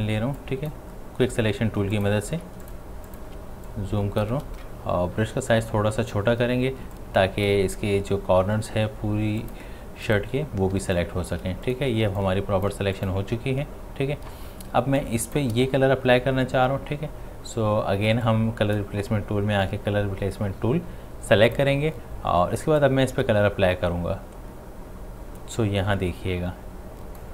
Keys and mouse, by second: 2.4 ctrl+space, 2.6 ctrl+click, 2.9 ctrl+space, 3.1 ctrl+click, 3.4 ctrl+space, 3.7 click, 5.2-6.5 typing, 7.0-10.8 drag, 10.8 space, 11.0 click, 11.2 space, 11.7 ctrl+alt+click, 14.8 space, 15.0 click, 15.3 space, 15.6 space, 18.2-27.3 drag.